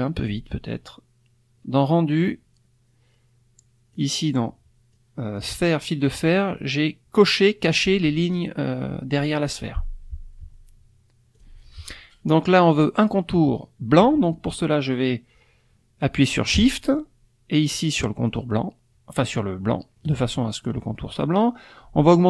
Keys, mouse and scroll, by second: 3.9 click, 4.9-5.5 drag, 11.3 click, 18.3 shift+click.